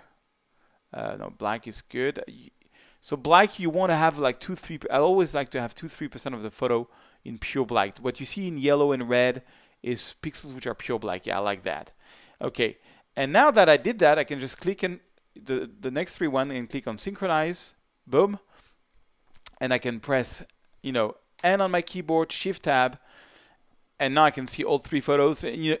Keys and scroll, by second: 21.4 n, 22.3 shift+n, 22.5 shift+Tab.